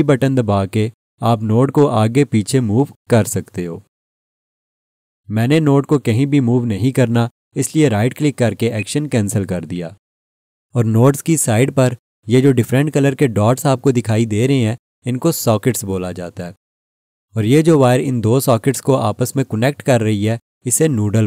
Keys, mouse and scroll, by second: 8.7 right click.